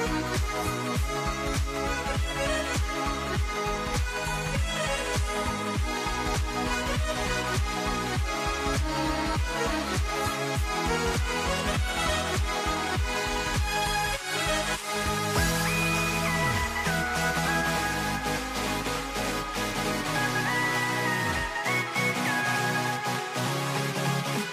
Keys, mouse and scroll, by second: 0.6 Tab, 2.3 s, 4.1-6.0 drag, 6.0 s, 8.1 a, 10.3-12.5 middle drag, 12.5 click, 14.8 g, 19.1 click, 21.3 Tab, 23.5 ctrl+r.